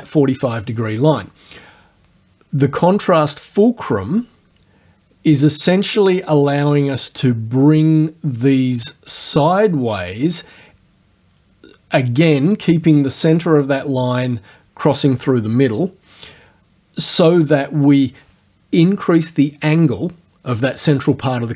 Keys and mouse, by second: 7.1-9.7 drag, 10.5-12.2 drag.